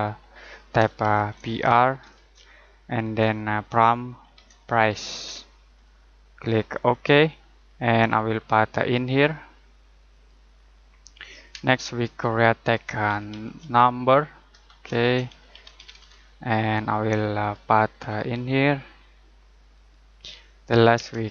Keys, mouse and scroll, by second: 1.0-2.1 typing, 3.0 Tab, 4.1-5.6 typing, 6.7 click, 8.1 scroll up 1, 10.1 click, 10.5 scroll down 1, 11.0 middle click, 11.5 space, 12.8-16.4 typing, 14.5 Tab, 17.4 click, 17.9-18.5 scroll up 1, 19.7 click, 20.1 scroll down 1, 20.5 middle click, 20.9 space.